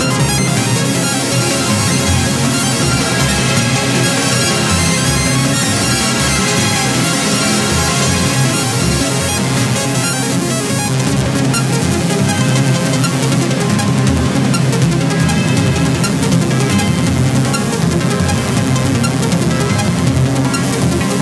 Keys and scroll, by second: 7.8 Up, 13.8 ctrl+-.